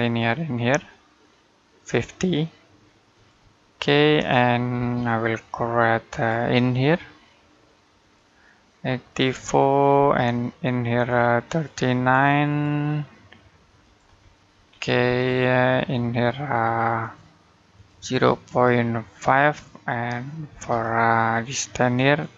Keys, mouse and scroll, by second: 0.4 click, 3.6 middle click, 4.6 space, 5.9 click, 9.4 middle click, 10.9 click, 14.1 middle click, 14.5-14.9 scroll up 1, 14.9 space, 16.8 click, 20.3 space, 22.2 click.